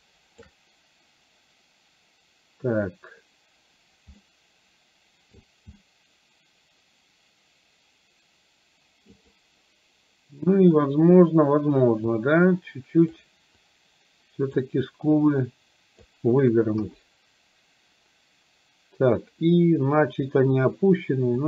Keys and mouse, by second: 4.3-5.3 middle drag, 5.8-9.2 middle drag, 12.1-13.2 drag, 13.6-14.6 drag, 15.2-16.2 drag, 16.8 KP_1.